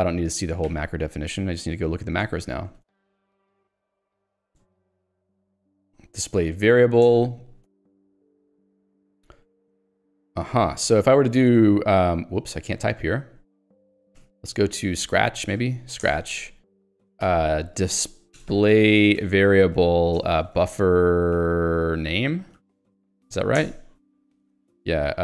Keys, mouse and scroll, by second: 0.0 ctrl+g, 1.0 ctrl+alt+j, 2.0 ctrl+j, 2.4 Return, 2.9 ctrl+s, 3.0-4.6 typing, 4.8 ctrl+j, 7.2 Return, 7.6 Escape, 8.3 j, 9.4 k, 11.0 j, 11.4 o, 11.6 Return, 12.4 j, 12.7 k, 14.9 click, 15.2-23.2 typing, 16.2 Return, 23.7 alt+Return, 24.7-25.2 typing.